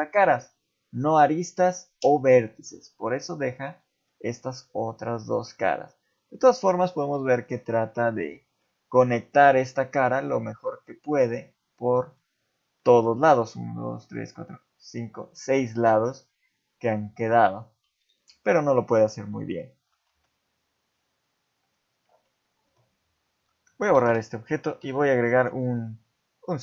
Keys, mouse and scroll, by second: 2.0 middle click, 3.8 middle click, 4.6 middle click, 5.6 middle click, 8.6 middle click, 10.0 middle click, 12.8 middle click, 15.2 middle click, 16.3 middle click, 18.0 shift+middle click, 19.3 ctrl+z, 21.7-22.1 scroll down 2, 22.1 Tab, 24.0 Delete, 24.8 KP_7, 25.4 shift+a.